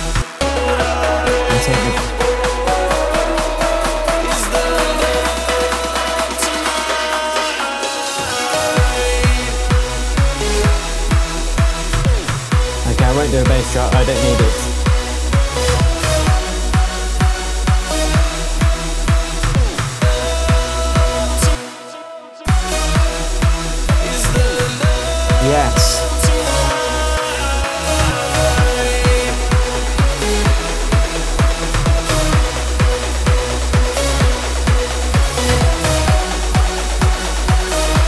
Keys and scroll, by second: 0.1 space, 21.4 space.